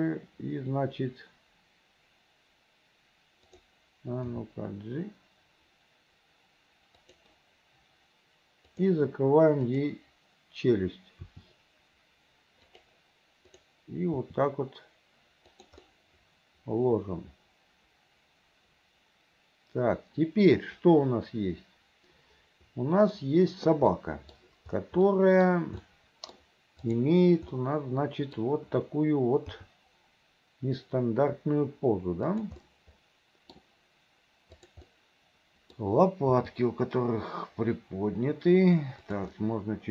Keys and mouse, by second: 3.6 click, 4.4 g, 9.8 click, 11.3 r, 13.6 click, 14.3 r, 16.1-23.3 middle drag, 24.1 middle click, 25.3 middle click, 26.1 middle click, 27.0 click, 27.6 middle click, 29.7 g, 32.8 click, 34.7 click, 35.0 click, 36.5 g, 39.5 click.